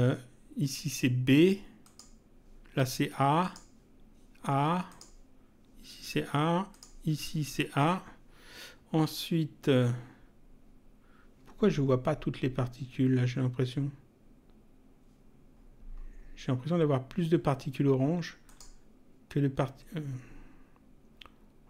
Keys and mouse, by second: 1.8 click, 3.4 click, 4.8 click, 6.7 click, 18.4 click.